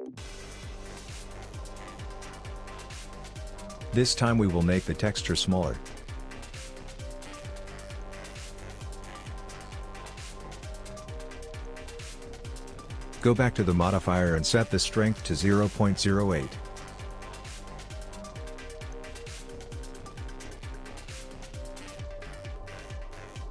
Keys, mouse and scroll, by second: 1.7 click, 6.1 shift+click, 13.5 click, 14.3 scroll up 3, 14.7-15.5 scroll down 1, 15.5-16.3 scroll down 1, 16.3 shift+click.